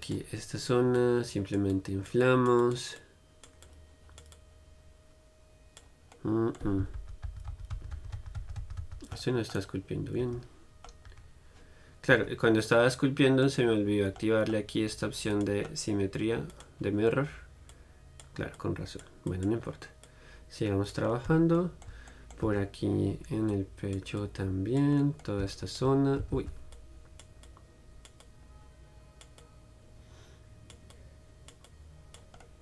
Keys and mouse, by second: 0.3-6.7 drag, 6.7 middle click, 7.2-9.4 ctrl+z, 9.4-10.4 middle drag, 10.4 Tab, 11.1 middle click, 11.3 a, 12.4 Tab, 19.9-22.2 drag, 22.2-25.2 middle drag, 25.2-32.6 drag, 26.6 ctrl+z.